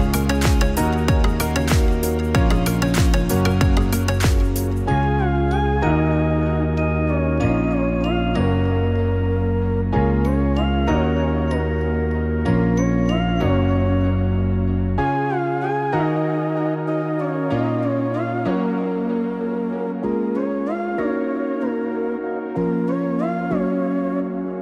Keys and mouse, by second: 4.5 alt+shift+click, 9.6-15.0 drag, 17.1-22.5 drag.